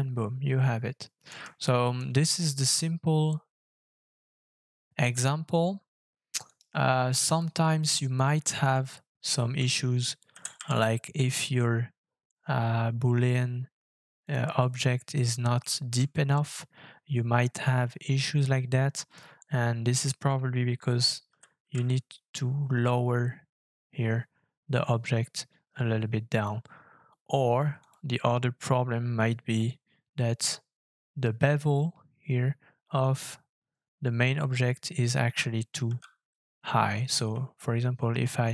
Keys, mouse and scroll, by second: 1.4 middle click, 1.6 shift+middle click, 2.1 scroll up 3, 2.7 middle click, 3.7 scroll up 1, 6.4 right click, 10.3 g, 10.6 z, 15.6 shift+middle click, 16.1 scroll up 4, 18.9-19.5 scroll down 3, 21.2 g, 21.6 z, 29.8-30.1 scroll down 5, 34.5-35.3 scroll up 7, 37.3 f, 37.6 shift+click.